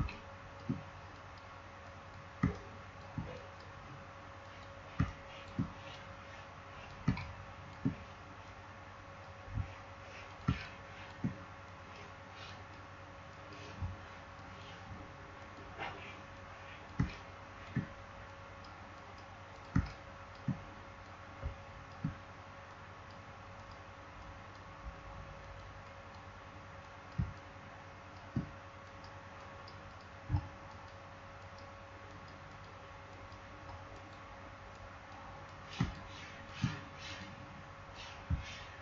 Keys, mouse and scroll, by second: 0.1 click, 0.3 space, 1.0 click, 2.3 space, 2.4 click, 2.7 space, 3.3 click, 4.9 space, 5.0 click, 5.3 space, 5.9 click, 7.0 space, 7.1 click, 7.4 space, 8.3-10.2 drag, 10.4 space, 10.5 click, 10.6 click, 10.8 space, 11.6 click, 16.9 space, 17.0 click, 17.3 space, 18.2 click, 19.7 space, 19.8 click, 20.1 space, 21.0-22.6 drag, 22.6-25.3 drag, 27.1 space, 27.3 click, 27.5 space, 27.9 space, 28.7 click, 35.7 space, 35.9 click, 36.1 space, 37.0-38.8 drag.